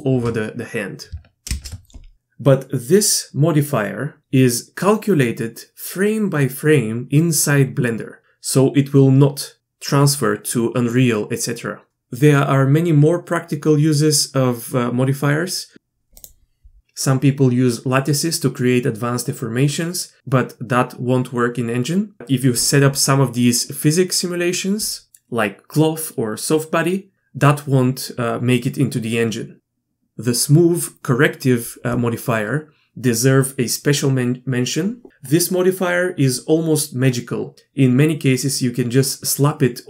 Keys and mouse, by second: 1.5 shift+space, 16.2-39.8 drag.